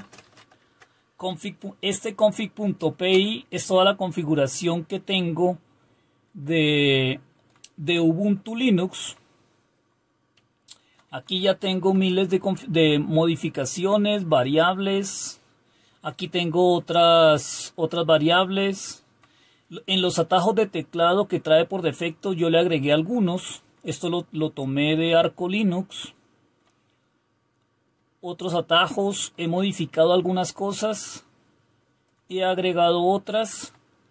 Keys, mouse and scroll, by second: 0.0-0.8 typing, 3.1 Return, 6.5 Down, 6.6-11.3 Down, 12.1 Down, 12.4 Down, 13.0-13.8 Down, 14.1 Down, 14.2 Down, 14.9 Down, 15.0 Down, 15.9 Down, 17.9-19.0 Down, 21.6 Down, 21.9 Down, 23.6 Down, 25.4-26.5 Down, 27.9-33.6 Down.